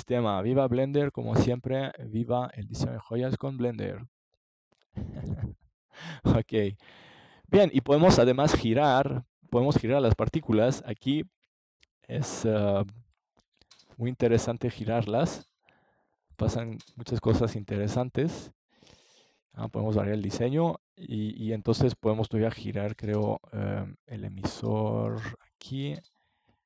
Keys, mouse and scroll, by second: 0.6 click, 5.1 middle click, 5.7-7.3 drag, 8.8 click, 10.0-13.7 drag, 14.7-15.7 drag, 21.3 click, 22.3-23.5 middle drag, 23.6-26.6 drag.